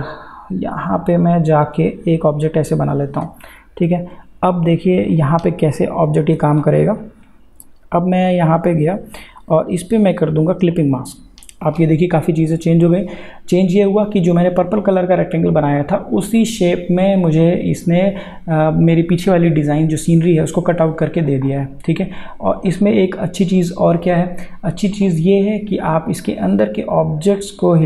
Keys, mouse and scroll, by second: 6.6-8.5 scroll up 1, 9.2 click, 24.9-27.8 drag.